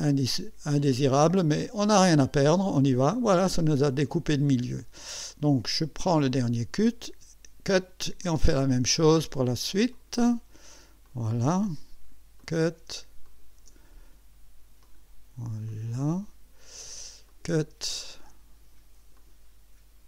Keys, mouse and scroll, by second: 1.6 click, 6.1 click, 8.2 ctrl+click, 9.9 click, 11.0 click, 12.4 click, 13.2 ctrl+click, 14.8 click, 15.7 click, 17.3 click, 17.9 ctrl+click, 19.2 click.